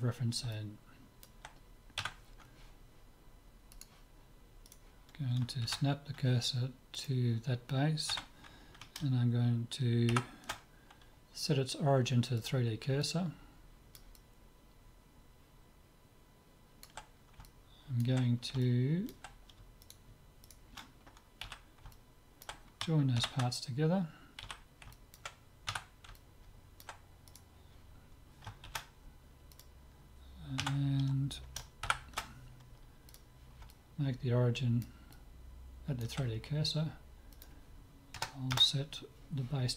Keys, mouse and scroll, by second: 0.6-2.6 middle drag, 2.0 Tab, 3.8-5.7 drag, 4.7-6.5 right drag, 5.7 shift+s, 8.1 Tab, 13.1-16.0 middle drag, 17.1-19.8 middle drag, 19.8-22.5 right drag, 20.3 click, 21.5 z, 21.9 click, 22.3-23.6 middle drag, 23.2 ctrl+j, 24.4 z, 24.9-27.3 middle drag, 25.7 Tab, 27.3 click, 27.3 right click, 27.7 middle click, 27.8 right click, 27.9 middle click, 28.1 right click, 28.7 shift+s, 30.6 Tab, 33.7-37.0 middle drag, 37.3-39.1 drag.